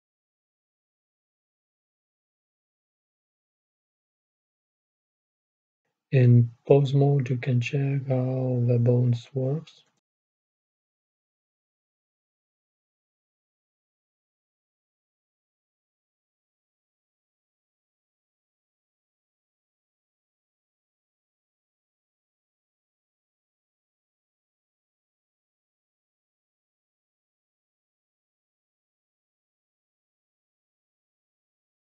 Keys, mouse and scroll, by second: 0.4 middle click, 1.4-6.4 middle drag, 6.4-9.1 drag, 7.8 typing, 9.4-15.1 right drag, 11.0-15.1 drag, 18.9-22.6 middle drag, 22.6-25.6 right drag, 25.6-27.5 drag, 30.1-31.8 drag, 30.1-31.2 right drag.